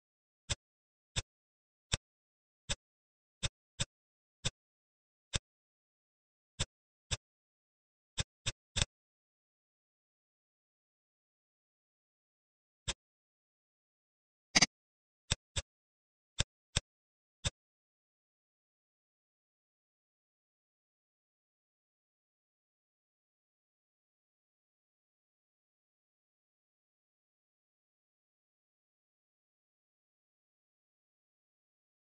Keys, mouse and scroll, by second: 0.4 click, 1.8 click, 2.6 shift+click, 3.3 shift+click, 3.7 shift+click, 4.4 shift+click, 5.2 shift+click, 6.5 click, 7.0 click, 7.8 Tab, 8.0 click, 8.3-10.3 middle drag, 12.8-14.3 middle drag, 14.4 middle click, 14.9-15.2 scroll up 2, 15.2 middle drag, 15.5 click, 15.9 Tab, 16.3 middle click, 16.7 click, 17.3 click.